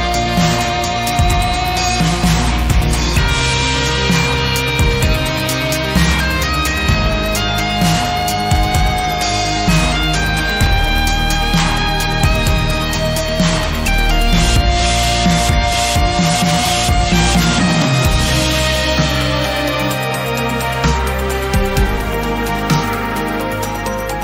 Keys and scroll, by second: 10.9 g, 16.7 Tab, 19.6 Tab, 21.0 2.